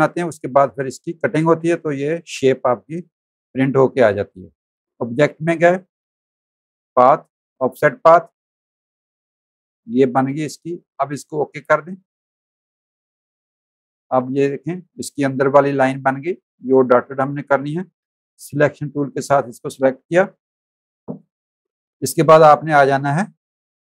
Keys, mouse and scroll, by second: 5.0 click, 7.6 click, 10.8 click, 13.0 click, 13.3 z, 13.5 click, 14.2 space, 15.3 v, 15.5 click, 16.3 click, 20.0 click.